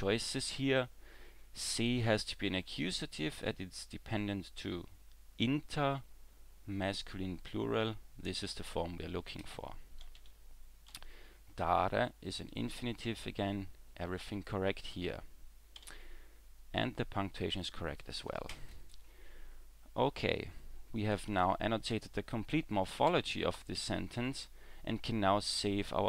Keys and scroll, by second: 10.9 w, 15.8 w, 23.1 e, 23.8 w.